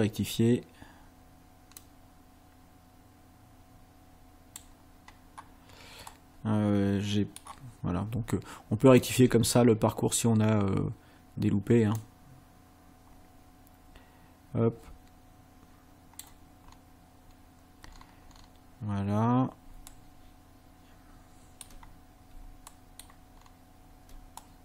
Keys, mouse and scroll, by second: 1.8-4.7 drag, 6.1-7.6 middle drag, 9.1 ctrl+click, 12.0-16.4 drag, 16.7-17.5 scroll up 2, 17.9-18.6 scroll down 2, 19.2 scroll down 2, 19.9-21.8 ctrl+middle drag, 22.7 ctrl+middle click, 23.4-23.7 ctrl+scroll up 1, 24.4-24.6 ctrl+middle drag.